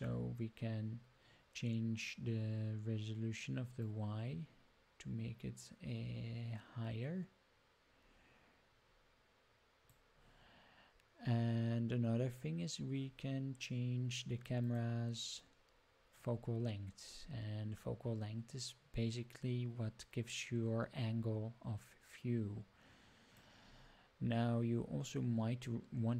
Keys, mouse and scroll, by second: 3.8-9.9 drag, 14.6 click, 16.1-23.4 drag.